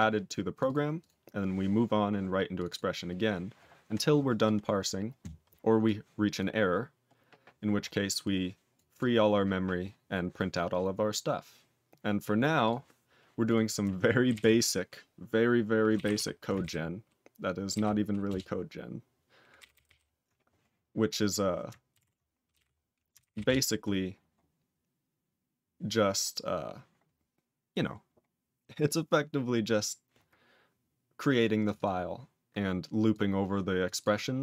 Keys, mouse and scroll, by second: 0.2 click, 0.5 click, 0.6 double click, 0.9 click, 2.5 click, 2.6 double click, 4.4 click, 4.8 click, 5.8 click, 6.3 click, 6.7-8.2 scroll down 5, 8.2 click, 8.7 click, 8.9 click, 12.6 click, 13.4 click, 18.3 ctrl+Return, 19.5 ctrl+n, 19.7 ctrl+n, 19.8 ctrl+n, 23.5 ctrl+Return, 26.2 scroll down 2, 28.0-29.0 scroll up 6, 29.7-31.6 scroll up 2, 31.6 click, 31.7 double click, 33.0 click, 33.8 click, 34.0 click.